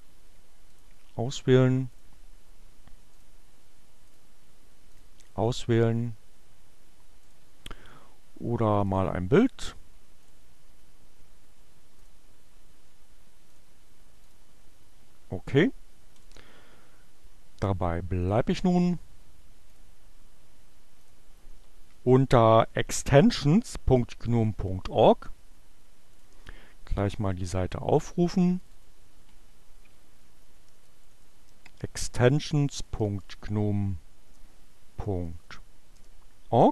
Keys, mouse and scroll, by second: 0.8 click, 3.2 click, 4.0 click, 4.9 click, 7.3 click, 8.6 click, 10.2 click, 12.1 click, 13.5 click, 14.4 click, 15.4-16.5 drag, 18.3 click, 19.8 click, 20.9 click, 28.9-35.4 typing, 28.9 click, 35.6 Return.